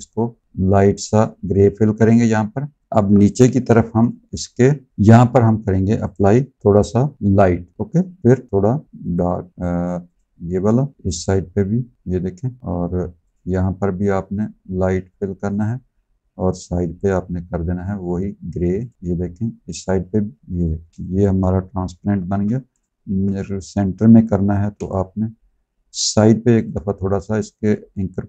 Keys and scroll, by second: 3.3 v, 20.9 space, 22.1 a, 22.9 z, 24.5 a.